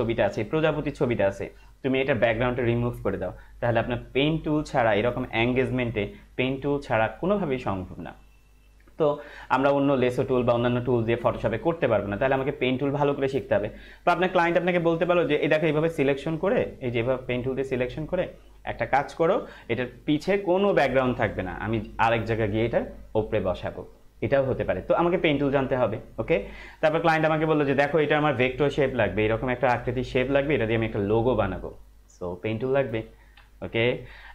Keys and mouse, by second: 14.9 Right.